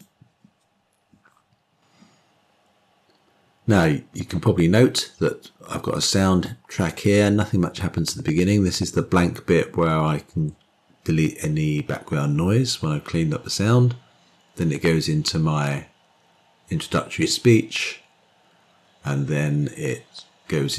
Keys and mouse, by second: 6.8-20.7 drag.